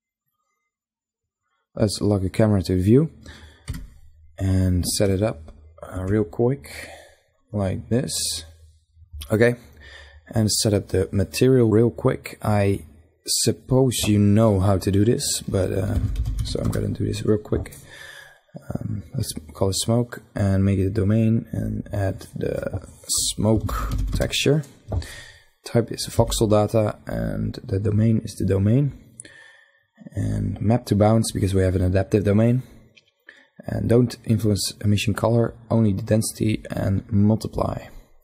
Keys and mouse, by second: 2.3 KP_0, 9.7-10.7 middle drag, 10.7 click, 11.2 middle click, 11.6-12.9 drag, 18.8-21.5 drag, 24.9-26.5 drag, 26.5 middle click, 37.2 middle click.